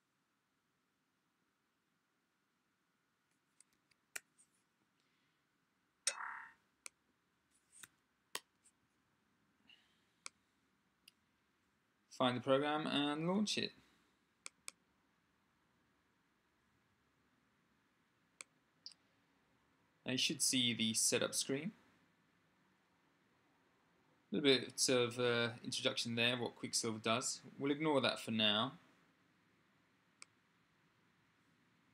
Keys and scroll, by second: 3.5 Tab, 3.9 space, 7.6 e.